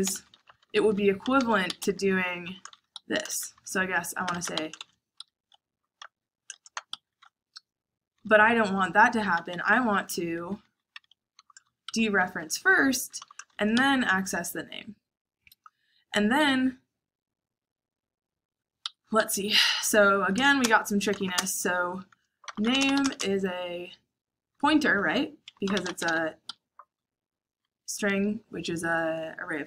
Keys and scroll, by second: 0.0-2.9 typing, 3.9-13.4 typing, 18.7 Escape, 19.1-23.6 typing, 24.8-26.8 typing.